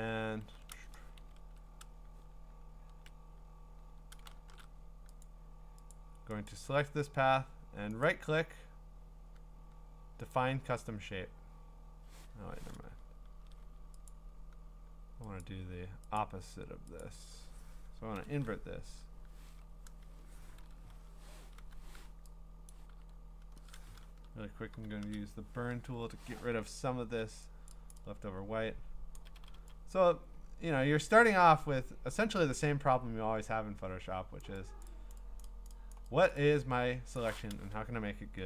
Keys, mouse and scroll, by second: 0.7 ctrl+z, 1.2 ctrl+z, 4.3 ctrl+shift+z, 5.2 click, 5.9 click, 6.5 click, 8.1 right click, 10.3 click, 12.3 Escape, 14.1 click, 15.5 click, 16.2 click, 17.0 click, 18.2 ctrl+i, 21.6 o, 22.7 click, 24.7 o, 26.6-27.2 ], 27.7 click, 27.9 click, 29.1 click, 29.1 ], 29.4 ], 29.5 ], 34.4-35.4 drag, 35.9 click, 36.3 click, 37.2 click.